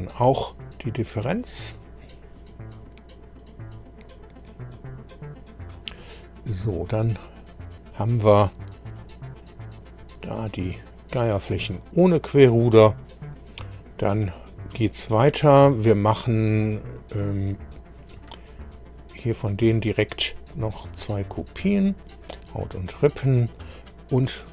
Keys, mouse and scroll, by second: 1.7 click, 6.5-6.9 scroll up 2, 7.2-9.1 middle drag, 9.4 middle click, 10.2 middle click, 17.0 click, 18.9 shift+click, 20.5 click, 21.6-21.9 scroll down 2, 24.4 click.